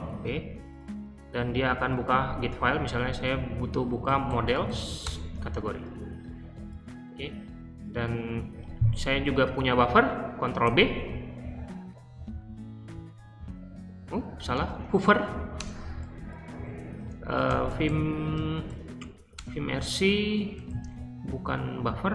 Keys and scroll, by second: 0.0 ctrl+p, 3.7-5.1 typing, 8.2 typing, 10.6 ctrl+b, 14.5-22.1 typing.